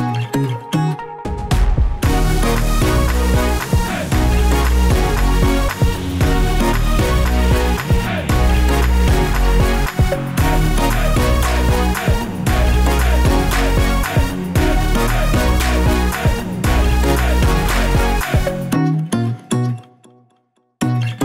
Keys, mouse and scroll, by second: 0.3 s, 1.2 click, 5.5 KP_0, 6.6 click, 8.6 shift+d, 9.4 click, 10.3 s, 11.3 click, 13.8 click, 15.4 click, 16.2 click, 17.9-18.2 scroll down 2, 18.2 click, 19.5 click.